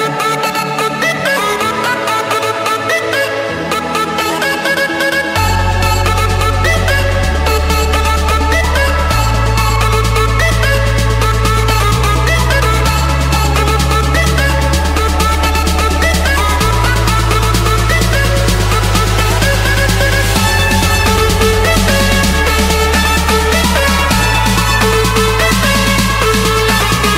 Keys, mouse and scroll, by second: 0.9 click, 2.3 click, 5.1-5.7 scroll, 5.7 click, 6.3 right click, 7.3 click, 8.8 click, 9.7 Escape, 10.7 click, 11.8 Escape, 12.0 Escape, 15.2-17.9 typing, 16.9 Return, 18.1 Escape, 19.7 click, 20.7 click, 21.0-21.4 scroll, 21.4-23.3 scroll up 16, 23.3 scroll up 3, 23.4 click, 23.7-24.2 scroll down 6, 24.2-24.9 scroll up 10, 24.9 scroll, 25.7 click, 26.2 scroll, 26.4 Escape.